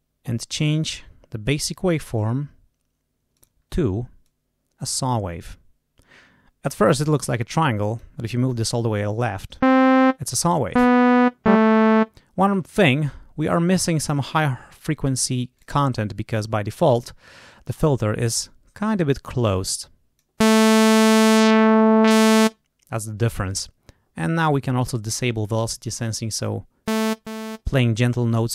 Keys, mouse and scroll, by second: 0.5 click, 3.3 click, 4.2 click, 7.2 click, 13.4 click, 15.5 click, 19.7 click, 21.2-22.5 drag, 24.3 click.